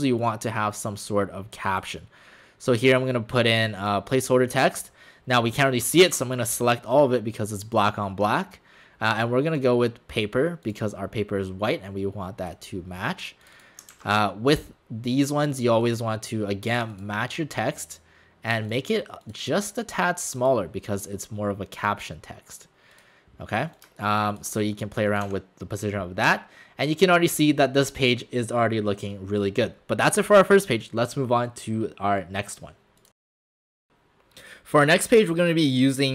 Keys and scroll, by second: 25.3 w, 26.5 alt+w.